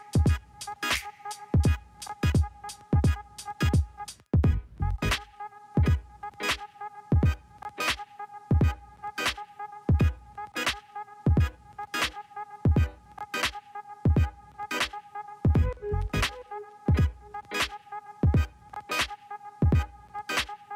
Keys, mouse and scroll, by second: 0.6 g, 2.1-3.2 middle drag, 3.2 click, 4.2 g, 5.9 click, 6.8 g, 9.1 click, 9.9 g, 12.2 KP_3, 13.4 scroll down 1, 15.5-17.8 middle drag, 17.8 KP_3, 20.6-20.7 drag.